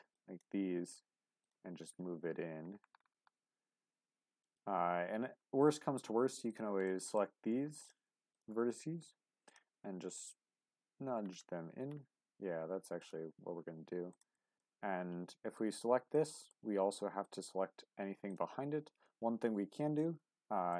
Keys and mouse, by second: 0.1 shift+click, 1.4 click, 3.0 g, 4.4 right click, 6.5 click, 6.8 middle click, 7.8 click, 9.4 click, 10.9 g, 13.0 click, 14.1 click, 14.6-15.6 middle drag, 16.2 middle click, 17.2 shift+click, 20.4 alt+z.